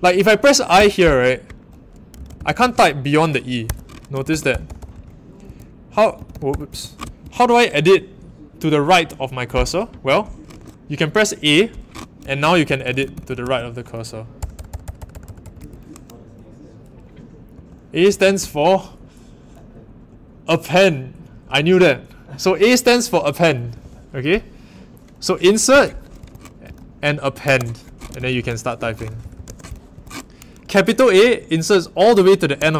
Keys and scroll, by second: 0.7 i, 1.9-7.2 typing, 3.6 Escape, 6.6 Home, 10.5 typing, 12.4-15.4 typing, 15.6 Escape, 17.5-18.0 typing, 23.6 typing, 25.7-29.9 typing, 29.9 Home, 32.5 shift+a.